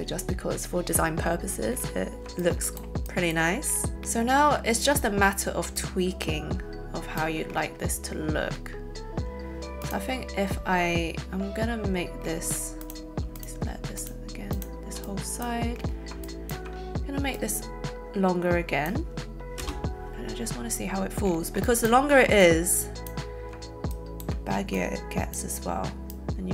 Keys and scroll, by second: 19.6 space.